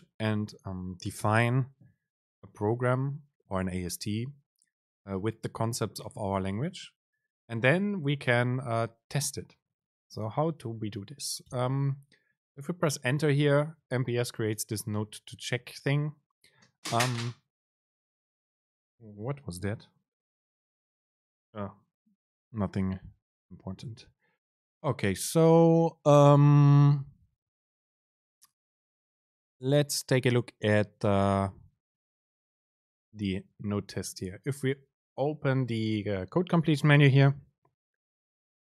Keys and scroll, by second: 11.7 Return, 34.3 super+space.